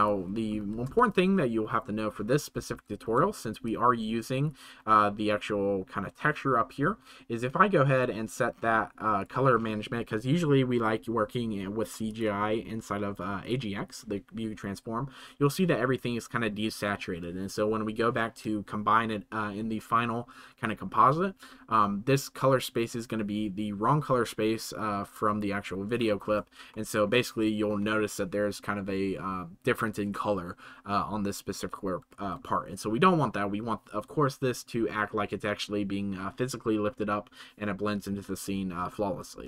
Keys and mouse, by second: 0.9 ctrl+s, 3.7-4.5 drag, 7.9 click, 12.2-13.4 drag, 26.6-27.1 shift+middle drag.